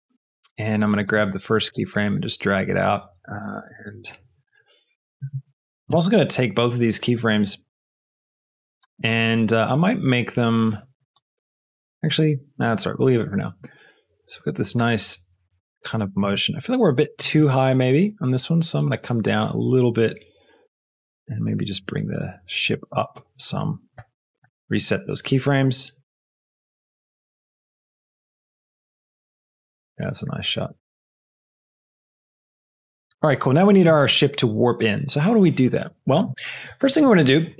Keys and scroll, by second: 1.6 g, 4.4 space, 11.2 space, 16.1 space, 24.0 shift+i, 27.1 space, 33.0 space.